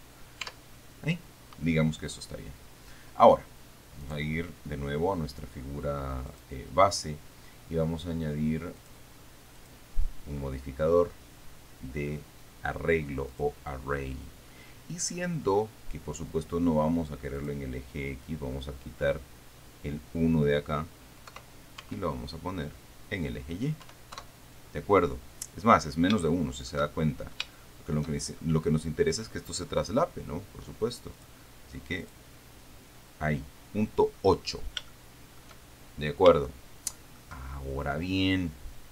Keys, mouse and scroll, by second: 0.7 Tab, 4.3 right click, 6.6 click, 9.1 click, 9.8 click, 13.6 click, 17.7 click, 21.6 0, 22.1 Tab, 24.1 1, 24.4 Return, 24.6 KP_Enter, 26.5 shift+click, 27.0 shift+middle click, 27.2-28.8 shift+scroll up 6, 27.8 shift+middle click, 28.8-29.6 scroll up 1, 31.4 click, 32.3 click, 33.8-34.7 scroll down 2, 35.2 shift+click, 36.7 shift+click.